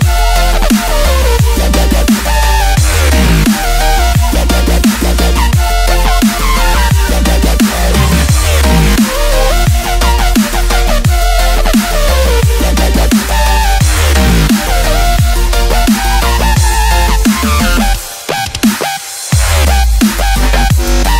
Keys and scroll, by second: 0.3 super+space, 0.4 super+space, 0.6 super+space, 0.8 super+space, 1.4-2.0 alt+super+space, 3.3 space, 4.0 super+space, 4.5 super+space, 4.6 super+space, 4.7 super+space, 4.8 super+space, 5.0 super+space, 5.1 super+space, 5.1 super+space, 5.5 super+space, 8.1-10.2 typing, 9.2 super+space, 11.3 Tab.